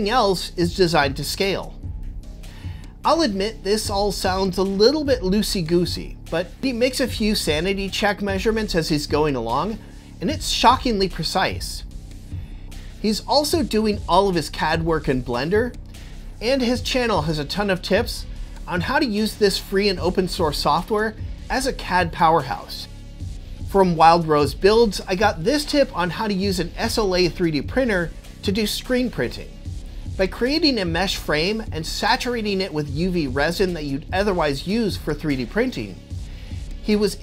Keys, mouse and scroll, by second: 8.6 click, 11.7-14.8 middle drag, 15.3-15.8 typing, 15.5 shift+click, 17.5-20.9 middle drag, 17.5 g, 17.5 x, 22.4 Tab, 22.4 z.